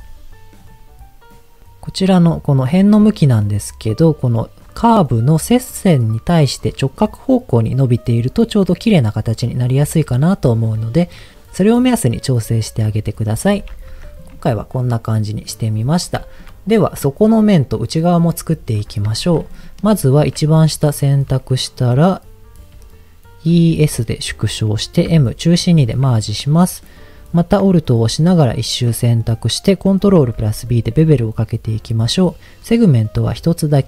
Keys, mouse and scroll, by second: 0.5 click, 2.0 click, 13.9 Tab, 14.5-15.5 middle drag, 15.5-16.1 scroll down 2, 16.1 shift+middle click, 16.7 middle click, 17.3 click, 17.7 middle click, 18.7 middle click, 19.1 Tab, 20.1 alt+click, 20.5-21.7 middle drag, 22.7-23.4 e, 23.7 s, 24.5 click, 25.1 m, 26.0 middle click, 27.9 alt+click, 29.1 middle click, 30.2 ctrl+b, 31.4-32.4 scroll up 1.